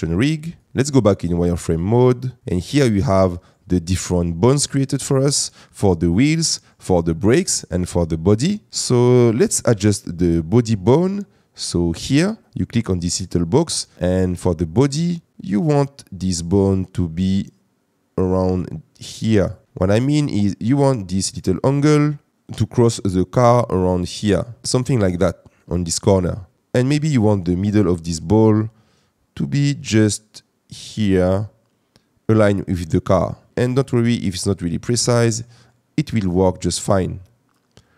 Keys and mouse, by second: 1.7 click, 2.2 middle click, 6.4 middle click, 12.4 click, 15.3-19.5 drag, 23.5-24.6 drag, 29.8-31.4 drag.